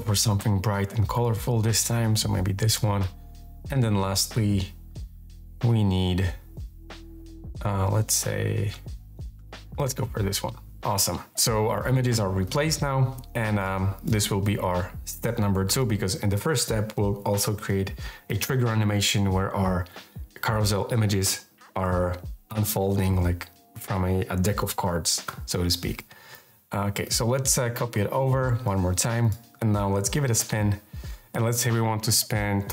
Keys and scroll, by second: 15.3 2.